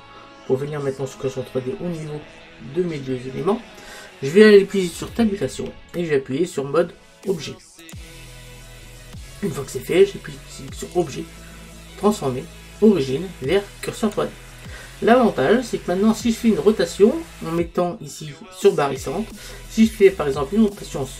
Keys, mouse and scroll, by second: 5.5 Tab, 15.2-18.3 middle drag, 19.3-21.1 middle drag.